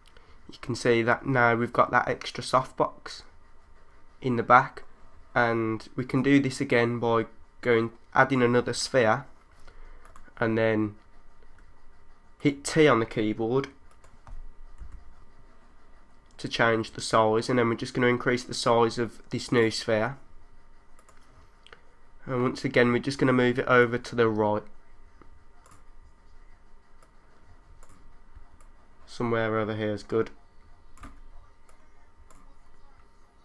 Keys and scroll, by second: 14.8 t, 28.4 3, 28.6 3.